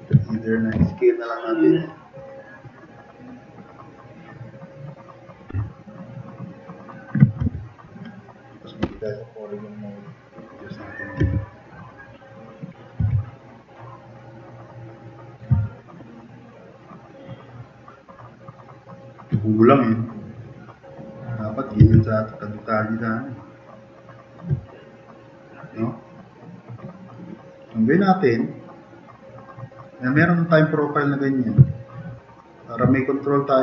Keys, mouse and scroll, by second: 0.7 t, 7.5 5, 8.8 4, 10.0 click, 11.1 e, 11.6 click, 13.1 t, 13.6 click, 15.6-17.7 drag, 18.2-18.9 drag, 20.2-21.6 drag, 21.8 e, 22.3-24.3 drag, 24.8-25.8 drag, 26.1-27.1 drag, 27.7-28.6 drag, 28.7-29.1 drag, 29.3-29.8 drag, 32.1 click.